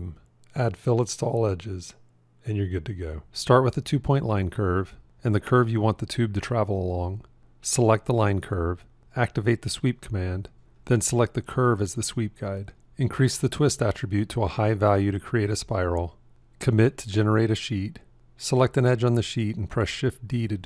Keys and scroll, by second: 20.5 shift+d.